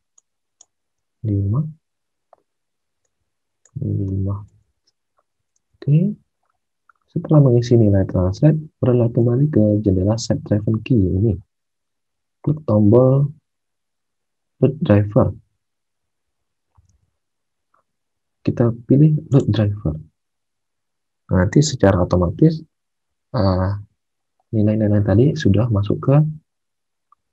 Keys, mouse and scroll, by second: 1.1 5, 4.0 5, 4.5 Tab, 5.5 alt+Tab, 16.9 alt+Tab.